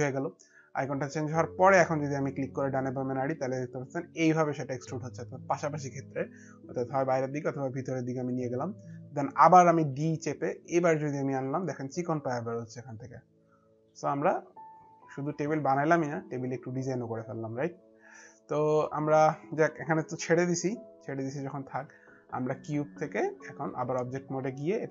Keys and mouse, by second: 1.3 click, 9.6 d, 10.2 click, 13.8 alt+click, 14.4 alt+click, 19.2 alt+click, 22.4 alt+click, 24.2 middle click, 24.2 click.